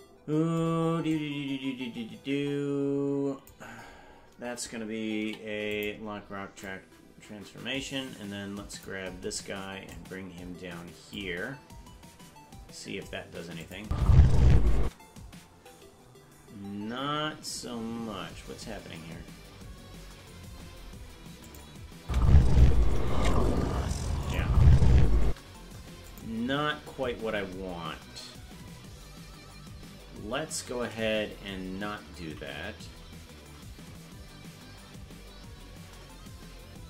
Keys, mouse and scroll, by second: 1.1-3.5 drag, 5.2 i, 6.7-8.9 drag, 9.9-11.2 drag, 13.6 click, 13.8 space, 14.8 space, 17.5-18.8 scroll down 20, 20.5-21.2 scroll up 12, 21.5 click, 22.0 space, 22.8 KP_0, 24.3 click, 25.2 space, 26.1 click, 26.6-27.7 scroll up 16, 32.3 ctrl+z, 32.9 ctrl+z, 35.9 ctrl+z.